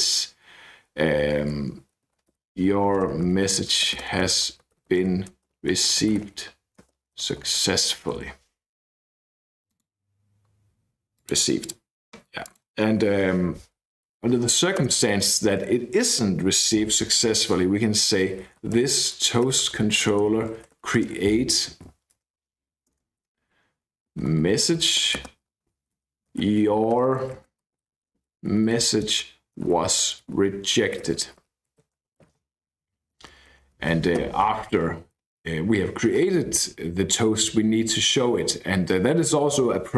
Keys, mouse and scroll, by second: 1.9-8.8 typing, 11.2 middle click, 11.6 middle click, 12.4 middle click, 14.1 BackSpace, 14.8 Return, 18.2-22.3 typing, 24.0-32.9 typing, 33.2 Up, 33.3 Up, 33.5 Up, 34.2 ..